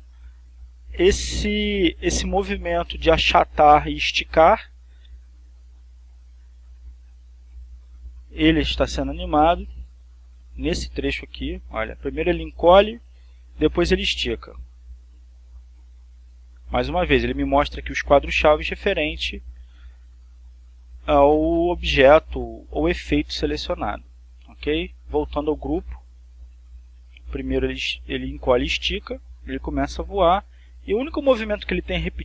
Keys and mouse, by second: 8.7 click, 10.2 click, 11.5-18.1 drag, 25.7 click, 27.4-32.2 drag.